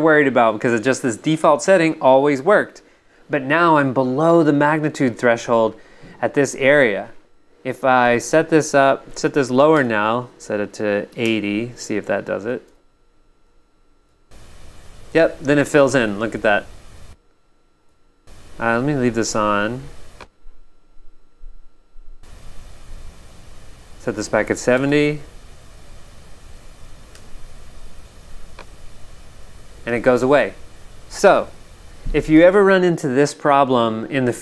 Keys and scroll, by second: 9.7 BackSpace, 11.1 8, 11.2 Return, 12.7 Tab, 14.1 g, 17.0 g, 24.7 BackSpace, 24.9 7, 27.1 Return, 27.6 Tab, 29.2 v, 32.4 g.